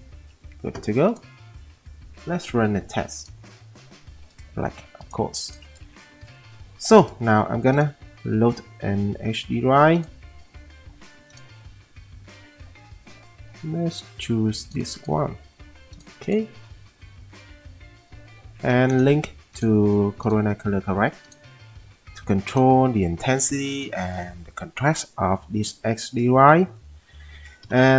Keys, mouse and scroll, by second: 0.3 alt+w, 6.2 m, 11.7 middle click, 14.9 click, 15.1 click, 27.7 F10.